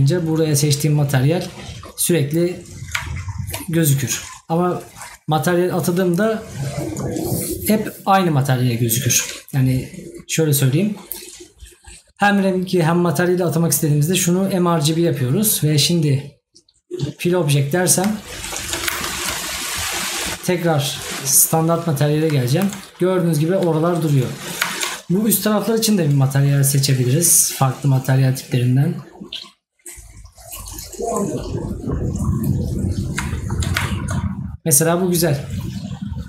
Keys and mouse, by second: 18.2 right click, 22.4 right click, 33.3 right click.